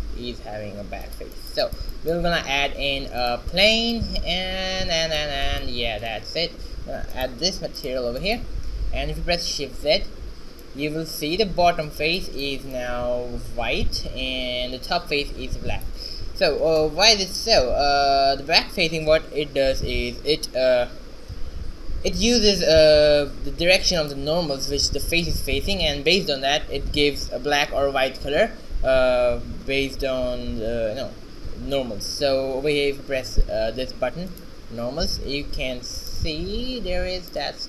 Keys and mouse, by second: 2.7 shift+a, 7.7 click, 10.2 shift+z, 18.5 shift+z, 23.4 Tab, 24.0-26.4 middle drag, 25.4 n, 30.6 a, 31.7 middle click, 34.4-36.5 drag, 35.6 a, 36.5-37.6 middle drag.